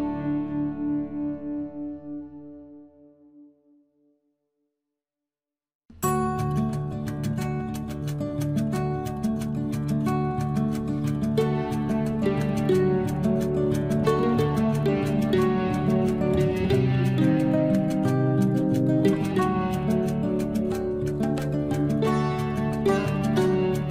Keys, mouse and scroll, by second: 2.4 click, 3.2 scroll up 1, 3.5 space, 4.8 t, 6.2 click, 7.0 scroll up 1, 7.5 space, 8.3 scroll up 1, 8.8 t, 9.5 click, 10.6 scroll down 1, 10.8 space, 11.8 t, 12.8 click, 13.8 scroll down 1, 14.0 space, 16.1 t, 17.4 click, 18.5 9, 18.8 Return, 23.6 scroll up 1.